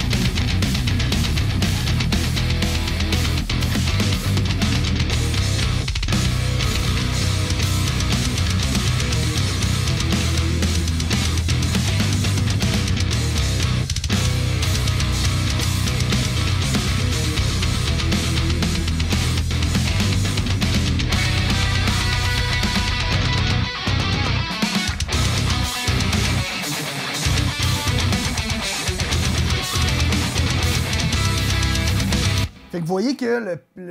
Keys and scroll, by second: 31.3 super+=, 32.2 space, 33.5 super+=.